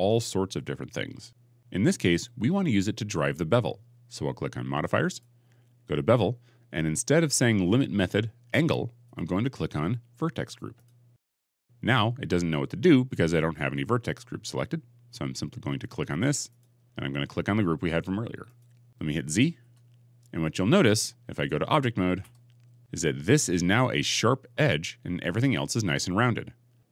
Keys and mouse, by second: 5.0 click, 8.9-10.8 drag, 16.5-18.5 drag, 18.5 middle click, 19.5 z, 22.1 Tab.